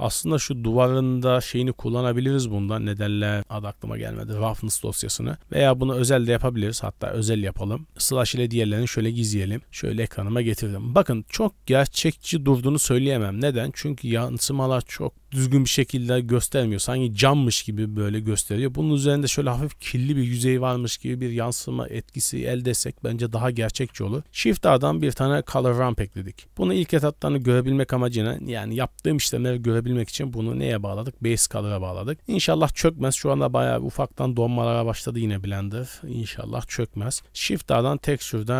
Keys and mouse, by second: 2.6 middle click, 4.0 click, 6.3-7.9 drag, 7.9 KP_Divide, 8.3-8.7 middle drag, 9.6 KP_Decimal, 10.6 click, 11.2-13.1 d, 11.5 click, 11.9 click, 19.8 middle click, 21.7 middle click, 22.1 middle click, 23.4 click, 23.7 shift+a, 26.1-29.4 drag, 30.0 click, 34.7-35.1 middle drag, 35.9 middle click, 37.0 shift+a.